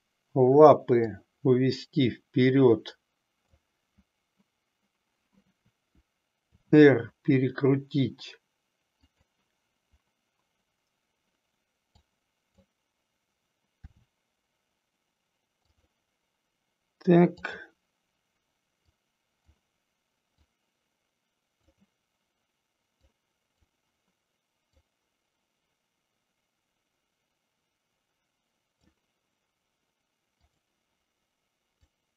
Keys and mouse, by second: 0.9-3.7 drag, 6.4 r, 9.2 click, 11.8 click, 13.8 r, 18.8-19.7 drag, 20.4-21.9 drag, 23.0-23.7 drag, 24.7-28.9 drag, 31.8-32.1 drag.